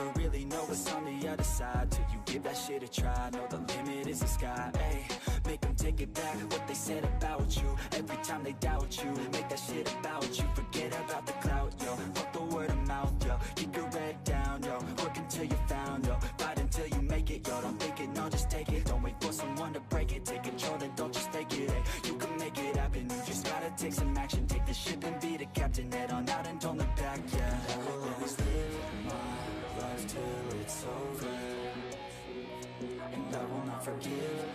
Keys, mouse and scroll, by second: 0.5 click, 1.4 ctrl+z, 2.2-3.2 middle drag, 3.2-3.9 drag, 4.3 middle drag, 4.6 scroll down 4, 4.7-5.5 shift+middle drag, 5.5 scroll up 1, 5.8 click, 6.7 click, 6.9 scroll up 3, 7.2-8.7 middle drag, 8.7 KP_3, 9.1 shift+middle click, 9.2-11.2 scroll up 3, 9.4 shift+middle click, 9.8 shift+middle click, 11.2 click, 12.0 ctrl+z, 14.0-14.6 scroll up 2, 14.6-15.8 drag, 15.8 ctrl+z, 16.0 ctrl+z, 17.1 scroll down 1, 17.3-18.7 shift+middle drag, 18.7 click, 19.1-22.7 drag, 22.7 ctrl+z, 24.4-25.8 drag, 25.8 ctrl+z, 26.0-26.8 scroll up 2, 26.8 f, 27.9 ctrl+click, 28.7 ctrl+z, 28.9 ctrl+z, 29.3 ctrl+z, 29.4 ctrl+z, 30.0 ctrl+click, 30.9 ctrl+z, 32.6-33.6 ctrl+drag.